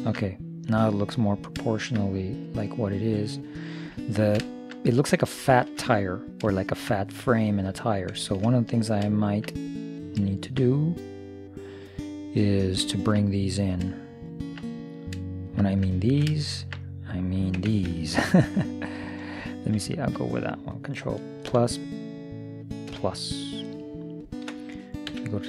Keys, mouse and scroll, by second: 2.8-3.9 middle drag, 4.1-12.4 middle drag, 17.6 Tab, 19.0-20.9 drag, 21.5 ctrl+KP_Add, 23.0 ctrl+KP_Add, 25.2 z.